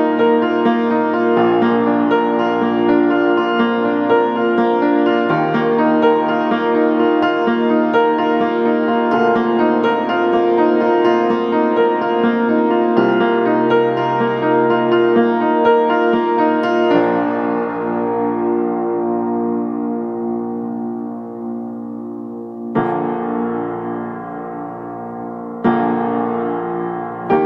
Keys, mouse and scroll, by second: 0.3 click, 1.6 right click, 3.1 click, 3.6 scroll down 1, 3.9 scroll up 1, 4.1 click, 4.5 scroll up 1, 4.6-10.9 drag, 10.9 right click, 11.1-13.4 drag, 13.7 middle click, 14.0 click, 14.2 scroll up 1, 14.4 click, 15.8 right click, 16.3 scroll up 1, 16.6 right click, 17.2 scroll down 1, 17.3 scroll up 1, 17.4 right click, 17.8 scroll down 1, 18.0 right click, 18.3 scroll up 1, 18.5 right click, 19.0 click, 22.4 right click, 22.6 scroll up 1, 22.7 right click, 23.2 click, 23.4 right click, 23.6 scroll down 1, 23.7 scroll up 1, 23.8 right click, 25.7 click.